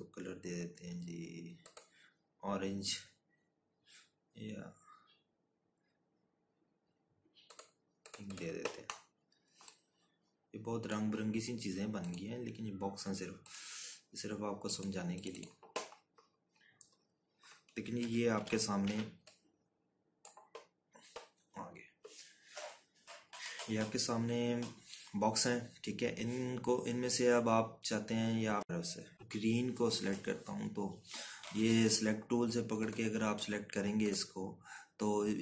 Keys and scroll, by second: 21.4 ctrl+-, 21.6 ctrl+-, 22.1 z.